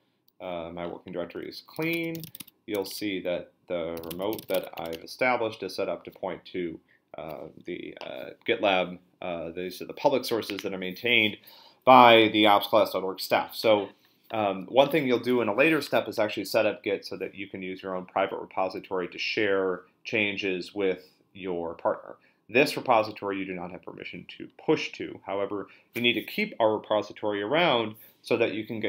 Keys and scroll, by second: 1.5-5.3 typing, 2.9 Return.